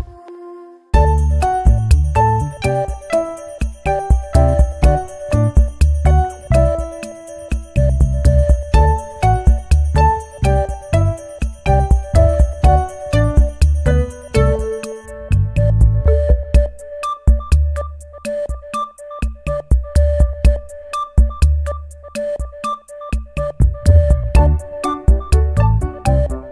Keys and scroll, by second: 4.0 Caps_Lock, 6.3-7.9 typing, 8.5 ctrl+a.